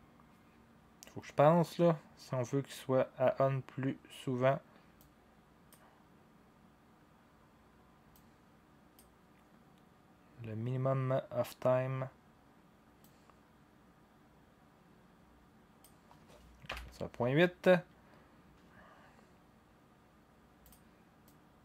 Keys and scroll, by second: 16.7 8.